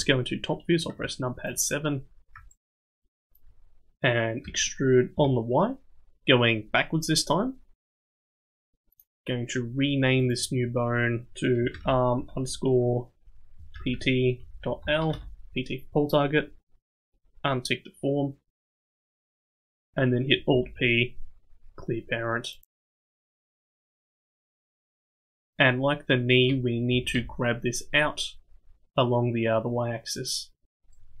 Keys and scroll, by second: 4.4 e, 20.5 alt+p, 26.9 g.